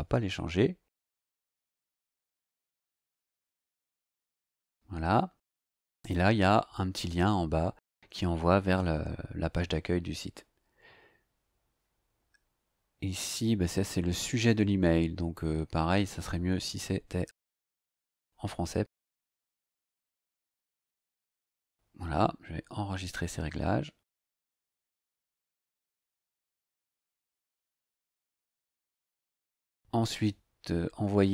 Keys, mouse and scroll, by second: 4.2-5.0 scroll down 3, 11.6-11.9 scroll down 1, 12.2-12.5 scroll down 2, 12.7-13.0 scroll up 2, 15.3-16.2 drag, 17.7 right click, 18.0-19.7 middle drag, 19.7 ctrl+v, 20.5 click, 21.3-24.3 scroll down 3, 24.3 click, 29.4 click.